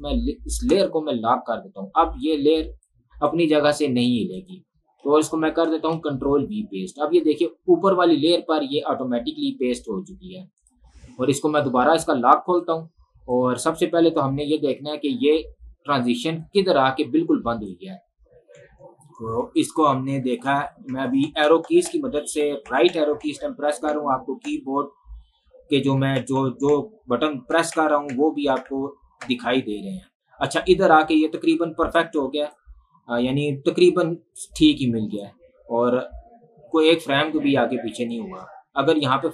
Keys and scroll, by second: 6.0 ctrl+v, 18.7 Right, 26.0 Right.